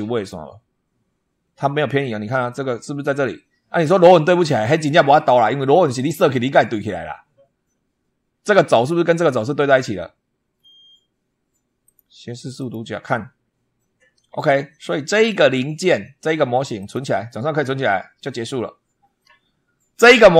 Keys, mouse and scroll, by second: 1.9-2.4 scroll up 4, 10.4-10.7 scroll down 2, 11.7 click, 12.4 click, 16.6 click.